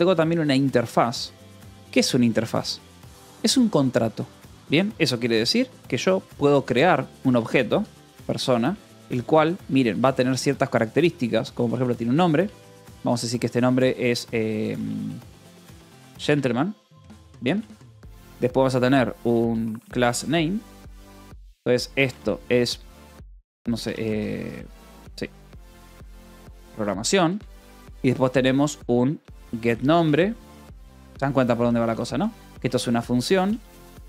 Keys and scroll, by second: 0.3 j, 1.6-3.2 typing, 4.0 Escape, 4.3 j, 4.9 j, 5.5 a, 6.9-8.5 typing, 8.9 Return, 9.4 Escape, 9.7 a, 10.2 Tab, 11.1-12.2 typing, 15.4-17.7 typing, 18.0 Return, 19.1-22.0 typing, 23.7-27.7 typing, 28.8-30.5 typing, 31.7-34.0 typing.